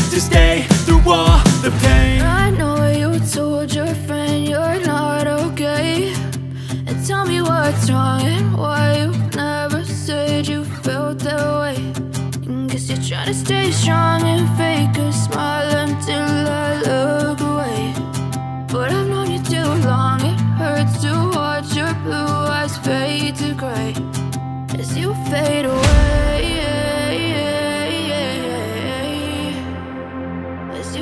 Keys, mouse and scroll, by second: 12.7 click, 18.1-29.7 drag, 30.0-31.0 drag.